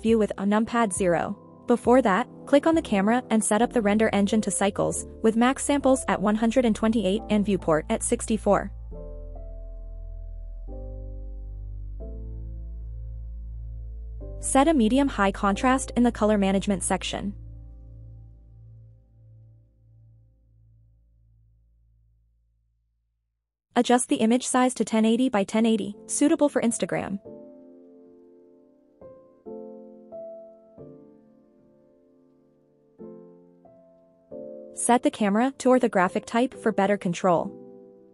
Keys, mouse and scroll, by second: 1.0 click, 2.3 click, 3.1-4.1 drag, 6.2 click, 9.3 click, 13.4-15.0 scroll down 7, 15.8-16.4 scroll down 1, 16.4 click, 17.2-18.8 scroll down 5, 19.0 click, 22.6-23.6 scroll down 1, 23.9 click, 24.7-25.6 scroll up 3, 26.1-26.6 scroll up 1, 26.6-28.7 drag, 30.7-33.0 scroll down 6, 33.6 click, 34.2-34.7 scroll up 3, 35.5 click.